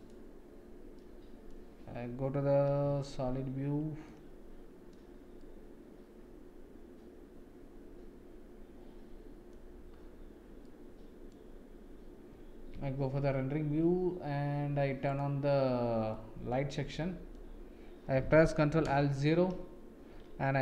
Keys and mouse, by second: 0.0-1.0 drag, 1.0 middle click, 2.8 z, 4.0 middle click, 5.4-9.5 middle drag, 10.6 middle click, 12.7 z, 16.1 middle click, 16.9 middle click, 19.0 ctrl+alt+KP_0.